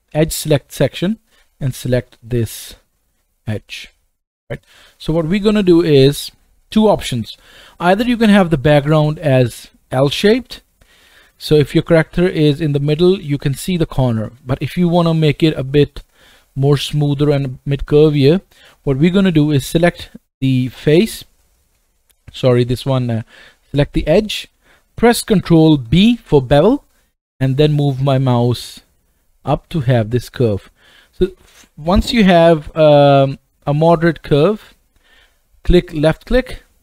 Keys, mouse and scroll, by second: 2.2 middle click, 2.2 right click, 4.8-7.3 scroll down 1, 7.3-36.8 right drag, 25.9 ctrl+b.